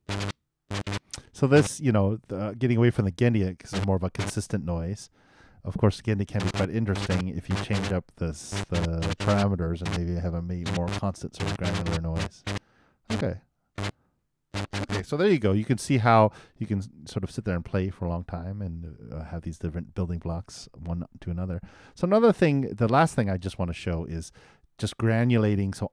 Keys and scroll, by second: 15.3 super+..